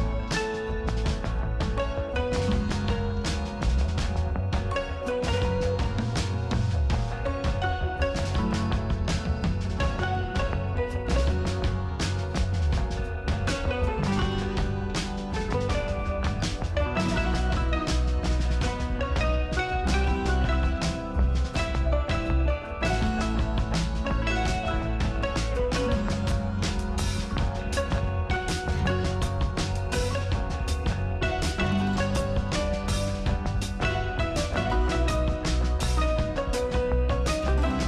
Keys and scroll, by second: 12.1 space, 31.9 space, 35.1 space.